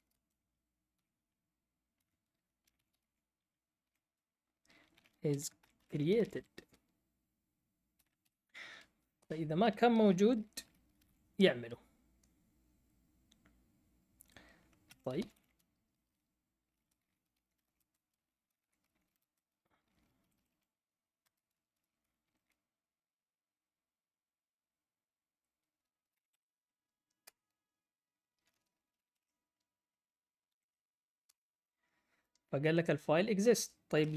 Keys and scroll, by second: 0.0-0.9 typing, 1.9-8.4 typing, 9.2 Return, 10.3-11.5 typing, 14.6-15.8 typing, 16.9-22.7 typing, 25.9-29.2 typing, 30.2-31.2 typing, 34.0-34.1 typing.